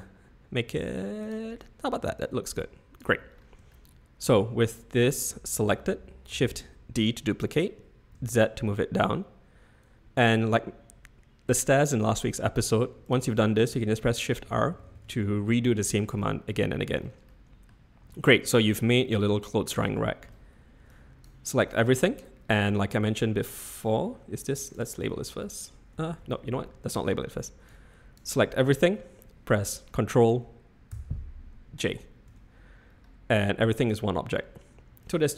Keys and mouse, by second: 2.2 click, 3.9 shift+middle click, 3.9 shift+click, 6.4 shift+d, 14.0-15.0 typing, 15.6 click, 17.3 click, 18.4 click, 19.4 click, 19.9 shift+click, 20.1 shift+middle click, 20.9 click, 24.7-26.9 drag, 27.7 click, 30.9 ctrl+j, 32.3 Tab, 35.0 click.